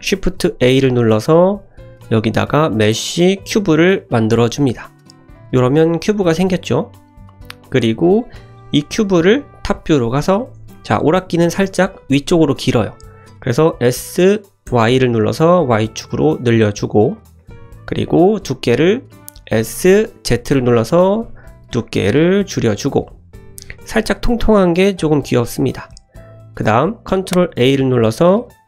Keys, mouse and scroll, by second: 0.2 shift+a, 5.1 click, 6.0 click, 6.3-7.3 middle drag, 7.6 click, 9.3 `, 10.3-10.7 scroll up 2, 10.7 shift+middle drag, 11.6 s, 13.7 s, 17.3-18.1 middle drag, 19.5 s, 25.4-25.9 scroll up 1, 25.9 middle click, 27.4 ctrl+a.